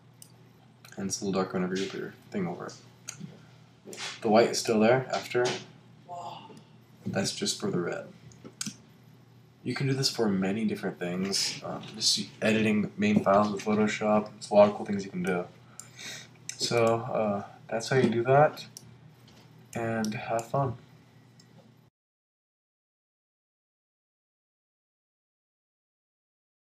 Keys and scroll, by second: 8.6 super+q.